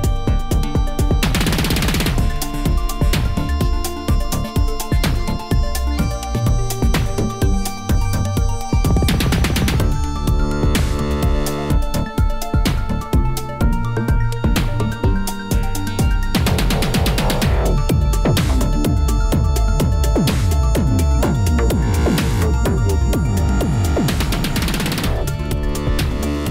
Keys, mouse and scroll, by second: 0.1 i, 0.5 click, 1.3 click, 1.6 shift+click, 2.2 shift+click, 3.4 k, 8.6 click, 8.9 middle click, 9.1 scroll down 2, 9.4 g, 11.0 Tab, 11.0-11.4 scroll down 4, 11.4-12.1 shift+middle drag, 12.1 click, 12.3 scroll up 1, 12.3-12.7 middle drag, 12.7 ctrl+s, 12.9-13.5 scroll down 4, 13.5-15.9 middle drag, 15.9-17.0 scroll up 4, 17.0 click, 18.2 alt+middle click, 18.8 shift+middle drag, 19.1 scroll up 1, 19.2 shift+d, 19.7 s, 21.7 shift+middle click, 21.9 scroll up 1, 22.1 g, 22.8 s, 23.7 s, 25.0 g, 25.5-26.5 middle drag.